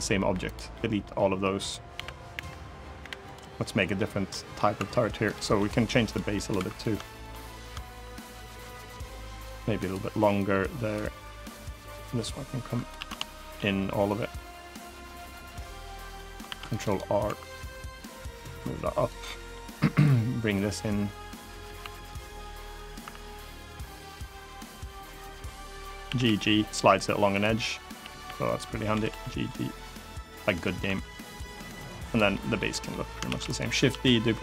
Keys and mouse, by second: 0.4 middle click, 1.6 l, 2.0 l, 2.7 Delete, 3.3 middle click, 4.0 middle click, 4.5 2, 5.0 click, 5.3 middle click, 6.0 middle click, 6.3 3, 6.9 shift+click, 7.6 shift+click, 8.2 click, 9.5 click, 10.1 click, 11.1 click, 11.8 click, 12.7 ctrl+z, 13.8-15.3 drag, 15.5 middle click, 16.2 ctrl+r, 16.6 right click, 17.0 3, 17.2 click, 17.7-18.8 drag, 19.0 middle click, 20.3-21.3 drag, 21.5 2, 21.7 click, 22.2 click, 22.7 1, 23.3 click, 24.1 click, 24.6 click, 25.8 g, 25.9 g, 27.0 click, 27.4 click, 27.7 g, 27.9 g, 28.2 click, 28.6 g, 28.8 g, 29.9 click, 30.1 middle click, 30.6 3, 31.0 click, 31.2 middle click, 31.8 click, 32.0 middle click, 32.4 middle click, 33.0 shift+d, 33.2 click, 33.6 s, 34.2 click.